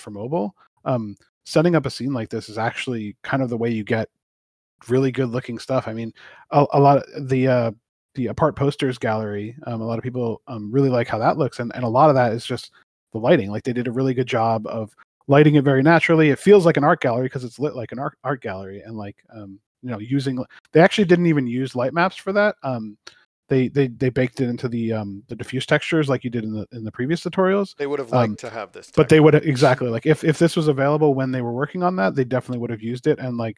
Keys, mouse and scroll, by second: 7.8 middle click, 20.1 click.